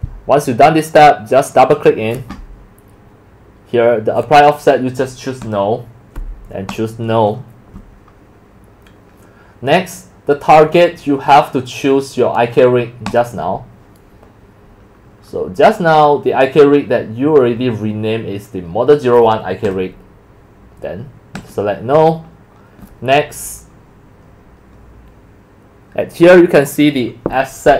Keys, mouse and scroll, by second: 0.2-0.7 scroll down 1, 13.1 click, 14.9-15.3 scroll down 2, 15.9 scroll down 2, 19.7 click, 21.4 click, 22.1 middle click, 24.0 click.